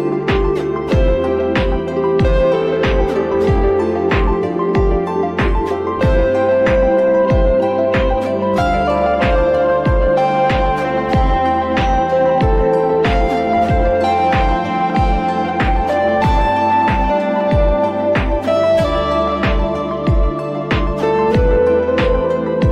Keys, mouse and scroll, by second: 3.2-5.7 drag, 5.7-6.0 scroll down 1, 6.8 n, 10.1 click, 11.0-14.1 drag, 18.3 Tab, 20.2 f, 21.0 Tab.